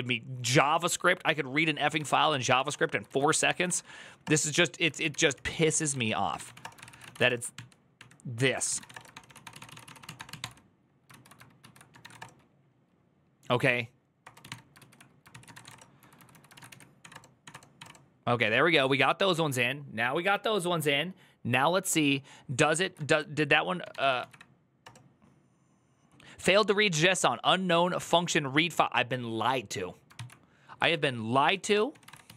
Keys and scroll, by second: 1.7-3.1 typing, 2.0 ctrl+d, 2.8 ctrl+a, 3.2 ctrl+c, 3.4 Up, 4.0 Return, 4.4-9.1 typing, 7.7 ctrl+n, 11.8 ctrl+u, 11.8 typing, 12.0 Return, 13.7-17.6 typing, 17.2 Up, 17.3 Return, 17.5 Up, 17.6 Return, 22.6 ctrl+a, 23.4-24.5 typing, 24.6 Return, 29.9 ctrl+c, 30.7-32.3 typing.